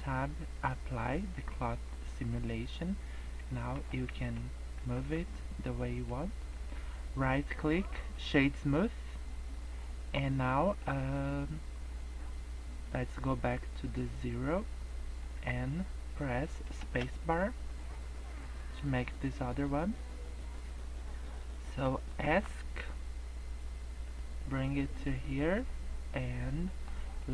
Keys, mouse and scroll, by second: 1.0 click, 1.5 click, 2.7 middle click, 3.7 g, 5.2 scroll up 1, 6.0 middle click, 6.3 scroll down 2, 6.5 middle click, 7.2 right click, 8.6 scroll up 1, 9.1 middle click, 10.8 middle click, 12.9 click, 16.7 space, 20.5 scroll up 1, 21.2 scroll down 2, 22.4 Escape, 24.2 click, 25.8 scroll up 1, 26.2 middle click, 27.2 middle click.